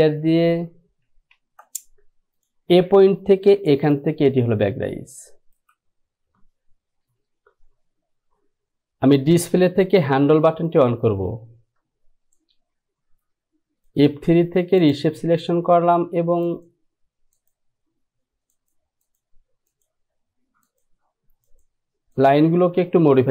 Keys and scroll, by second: 1.7 ctrl+z.